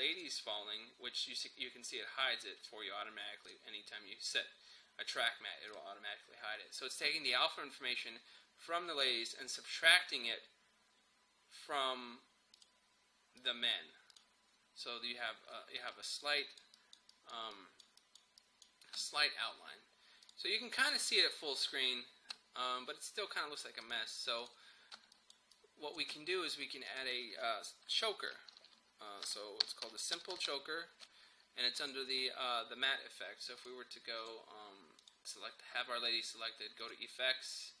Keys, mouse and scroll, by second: 0.2 click, 3.5 click, 12.6 click, 15.5-15.9 scroll up 1, 15.9-18.5 typing, 16.1 click, 16.8 click, 17.1 click, 18.0 click, 18.4 click, 18.5 click, 20.3 click, 23.9 click, 24.8 scroll up 1, 25.0 space, 25.2 click, 25.5 space, 26.9 click, 28.5 click, 29.1-31.0 typing, 31.8 click.